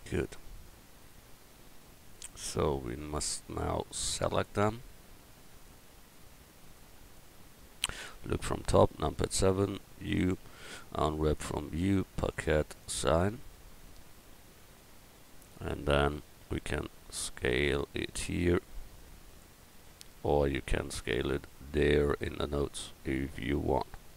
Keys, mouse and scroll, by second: 8.8 KP_7, 10.1 u, 12.3-13.6 drag, 13.6 right click, 17.0 s, 22.9 Tab.